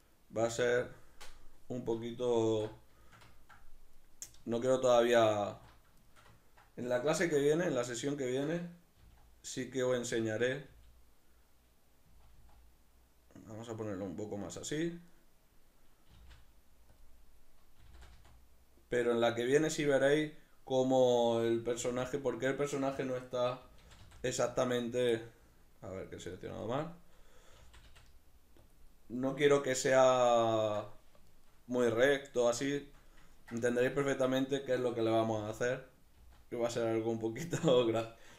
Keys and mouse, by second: 0.1 right click, 0.4 g, 0.8 click, 2.4 alt+q, 3.1 ctrl+shift+middle click, 4.0 right click, 4.4 alt+q, 6.1-7.1 shift+middle drag, 7.1 alt+q, 7.9-10.3 ctrl+middle drag, 8.9 g, 10.3 right click, 10.7 g, 14.5 click, 15.1 right click, 16.1 g, 17.0 click, 17.8 r, 19.6 click, 20.1 right click, 21.7 g, 23.1 right click, 23.6 g, 24.9 right click, 25.1-26.4 middle drag, 26.4 right click, 26.7-28.7 middle drag, 27.5 g, 28.7 click, 28.9-37.4 middle drag, 35.3 r, 37.4 click, 37.7 right click.